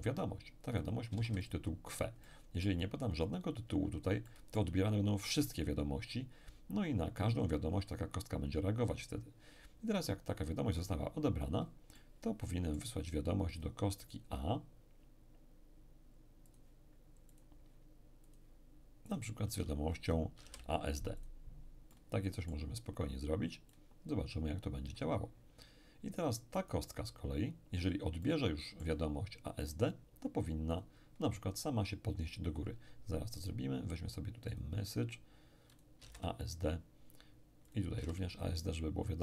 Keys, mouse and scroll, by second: 1.1 q, 1.1 w, 1.3 e, 2.2-3.6 middle drag, 3.7-4.2 scroll up 1, 4.2-5.5 middle drag, 11.9-14.6 middle drag, 13.5 click, 16.5-20.1 drag, 20.4 a, 20.4 s, 21.2 click, 21.2 d, 21.9 middle click, 22.7-23.3 scroll down 1, 23.3-23.7 scroll down 1, 23.7-25.9 drag, 26.6 right click, 28.2-30.7 middle drag, 29.6 click, 30.7 click, 34.5 click, 35.7-37.6 drag, 36.0 a, 36.1 s, 36.1 d, 37.7-39.2 drag, 37.9 a, 38.1 d.